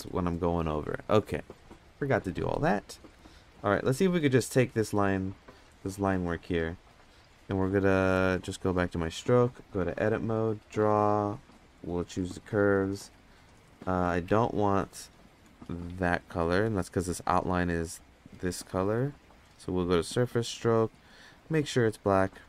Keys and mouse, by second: 2.5-3.2 middle drag, 4.0 middle drag, 4.7 middle drag, 6.4-6.9 drag, 7.7 click, 9.7-10.3 drag, 12.7-14.4 drag, 16.7 click, 18.7 click, 19.4 click, 20.1 click, 20.9 click.